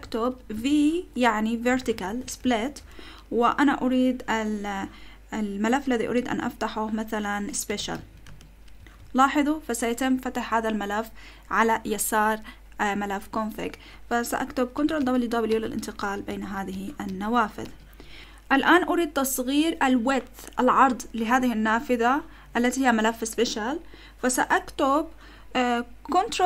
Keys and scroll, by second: 0.0-2.9 typing, 7.4-8.4 typing, 8.8 Return, 14.8 ctrl+w, 15.0 ctrl+w, 15.5 ctrl+w, 16.0 ctrl+w, 16.3 ctrl+w, 17.1 ctrl+w, 17.6 ctrl+w.